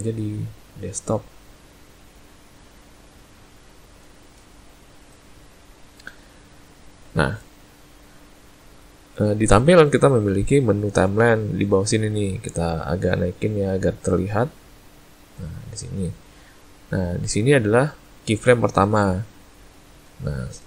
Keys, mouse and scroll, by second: 13.3 click.